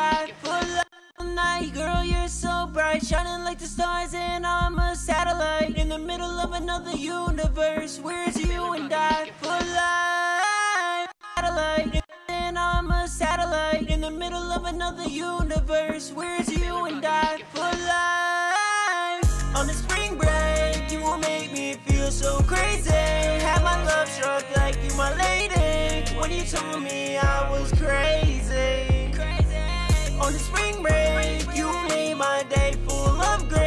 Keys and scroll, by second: 2.0 ctrl+Up, 2.1 ctrl+Up, 2.2 ctrl+Up, 11.3 space, 17.0 super+s, 17.2 super+Tab, 21.5 super+Tab, 24.5 ctrl+shift+Up, 25.8 super+s, 29.2 ctrl+shift+Home, 31.6 ctrl+shift+Home, 32.8 super+s.